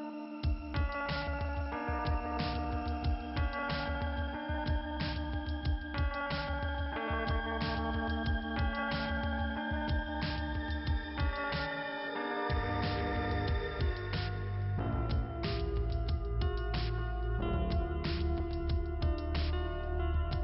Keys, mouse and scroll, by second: 1.6 click, 3.0-3.5 scroll down 2, 5.1 scroll down 2, 6.8 middle click, 8.2 click, 8.9 click, 10.6 click, 12.4 click, 13.1 middle click, 14.1-14.6 scroll up 2, 15.5 click, 18.5 click, 19.4 click.